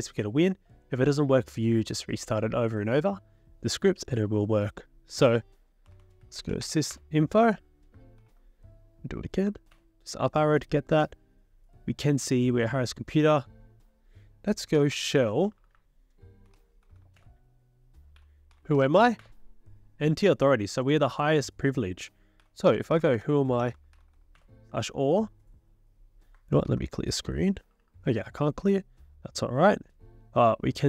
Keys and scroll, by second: 5.7-7.1 typing, 8.2 ctrl+l, 9.5 Up, 9.7 Return, 14.5-19.5 typing, 22.2-24.6 typing, 26.7 ctrl+l, 27.6 BackSpace, 27.8 BackSpace.